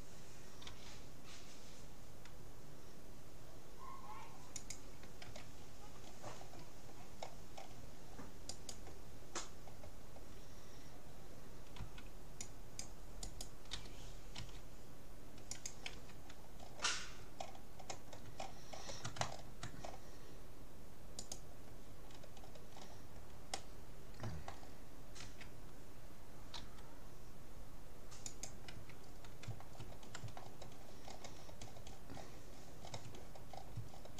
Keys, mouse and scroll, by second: 0.6 g, 5.4 a, 5.6-7.2 scroll up 1, 7.2-8.1 scroll down 1, 8.1 middle click, 8.6-10.2 right drag, 10.2-11.6 middle drag, 11.8 c, 13.8 g, 16.0 a, 16.2-21.2 middle drag, 21.2-23.0 right drag, 23.0-24.8 middle drag, 24.8 click, 25.2 a, 26.6 g, 28.8 a, 29.2 middle click, 30.1 middle click, 33.5 middle click, 33.9 middle click.